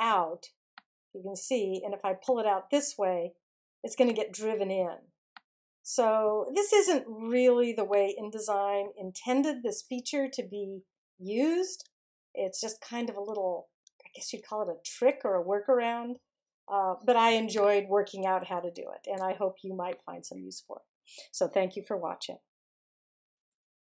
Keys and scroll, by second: 10.3 super+z, 18.6 super+-.